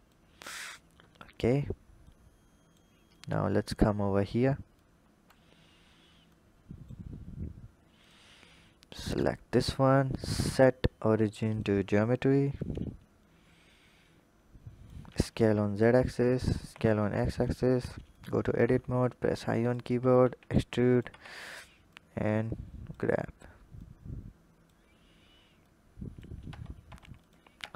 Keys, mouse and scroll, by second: 0.2-1.9 scroll up 5, 1.9-3.0 drag, 3.7-4.6 scroll down 3, 4.6-5.6 drag, 5.6-6.1 scroll down 2, 6.1 click, 7.0-7.4 scroll up 2, 7.8 click, 8.9-11.9 drag, 11.9-12.7 scroll up 1, 13.5-14.9 drag, 14.9 s, 16.4 s, 17.5 Tab, 18.0 alt+click, 18.7 i, 20.0 e, 20.9 Tab, 21.7 click, 23.6 click, 25.4 click, 26.3 Tab, 26.7 Tab, 27.0 click, 27.4 Tab.